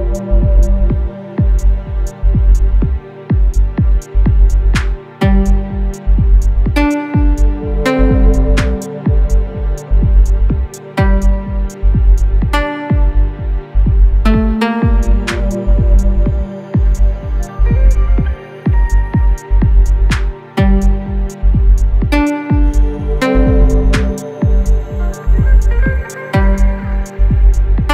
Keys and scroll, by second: 7.8 6, 8.4 5, 9.3 F1, 11.9 4, 15.0 3, 15.5 ], 17.9 5, 18.3 4, 19.6 F9, 24.3 3, 26.9 ctrl+d, 27.1 Escape.